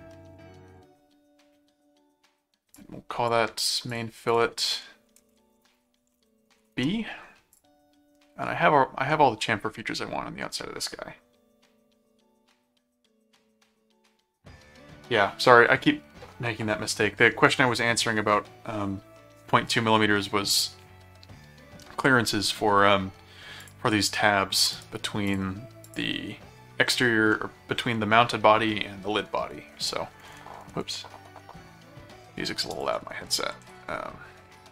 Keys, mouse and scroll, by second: 2.7 click, 3.9 click, 5.1-7.1 typing, 7.5 click, 7.9 middle click, 9.1 middle click, 23.6 click, 24.7 right click, 25.3 click, 25.9 click, 27.3 middle click, 32.7 click, 33.6 s.